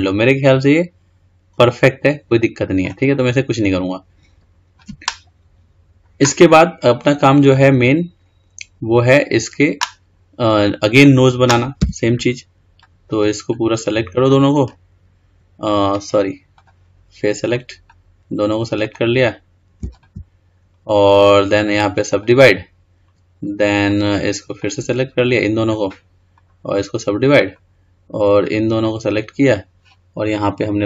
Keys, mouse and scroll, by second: 3.2-3.9 scroll down 4, 3.9-4.5 scroll up 3, 4.5-7.1 scroll down 3, 7.1-7.5 scroll up 2, 7.5-8.4 scroll down 2, 8.4-9.5 scroll up 3, 9.5-10.1 scroll down 2, 10.1-11.1 scroll up 2, 11.1-11.5 drag, 12.0 Tab, 13.0 click, 14.5 click, 17.1 click, 19.0 click, 20.1 shift+click, 21.4-24.1 right drag, 24.1 click, 25.5 click, 26.5-28.6 right drag, 28.6 click.